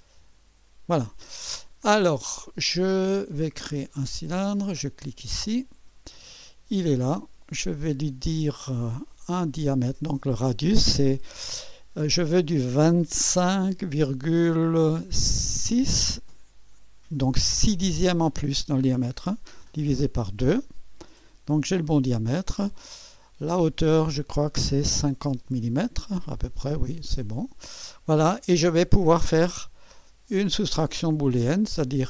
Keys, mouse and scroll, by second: 5.3 click, 6.9 click, 9.8 click, 12.9 2, 13.7 5, 14.9 KP_Decimal, 15.7 KP_6, 19.6 /, 20.1 KP_2, 23.6 click, 25.0 KP_5, 25.4 KP_0, 27.2 click, 27.5 typing, 29.9-31.2 drag.